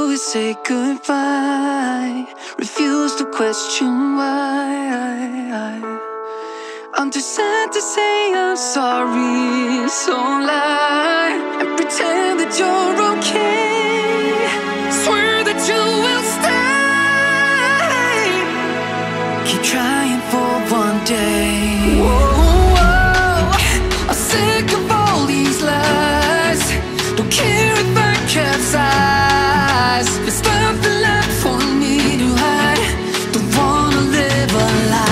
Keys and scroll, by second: 1.1 ctrl+z, 9.0 ctrl+shift+], 11.2 ctrl+-, 16.6 ctrl+z, 18.0 ctrl+-, 22.1 ctrl+-, 26.6 ctrl+z, 34.4 ctrl+z.